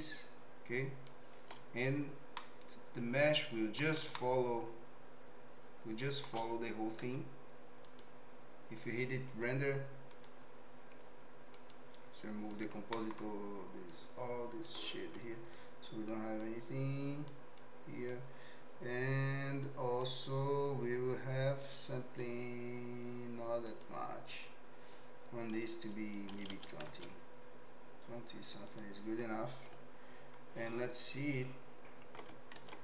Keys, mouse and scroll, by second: 2.3-3.8 middle drag, 4.3-6.3 shift+middle drag, 7.0 z, 10.1 click, 11.6-12.7 drag, 13.0 middle click, 13.9 click, 15.5 Delete, 16.4 click, 17.6 click, 19.7 click, 21.6 click, 23.7-27.0 drag, 28.7 click, 32.5 ctrl+s.